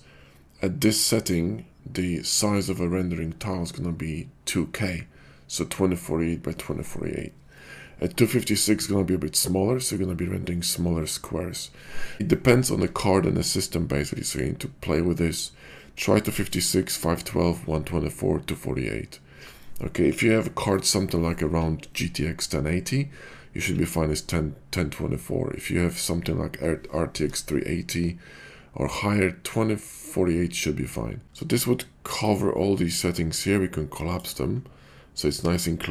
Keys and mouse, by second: 32.2 click, 34.1 click.